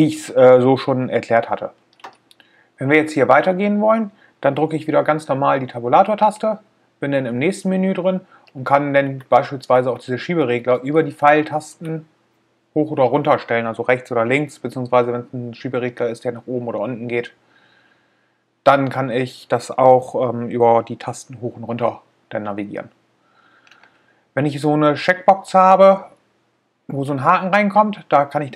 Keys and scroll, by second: 6.5 Tab.